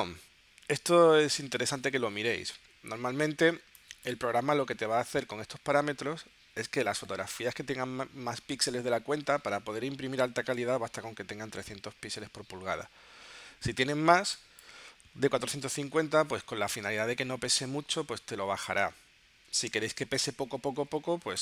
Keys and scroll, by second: 21.3 0.